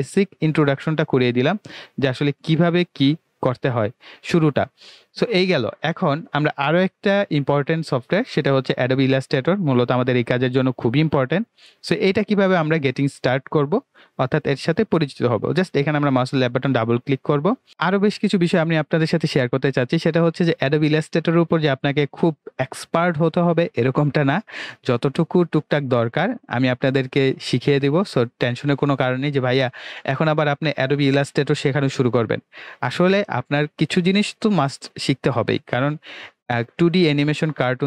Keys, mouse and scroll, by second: 8.4 click, 15.4 click.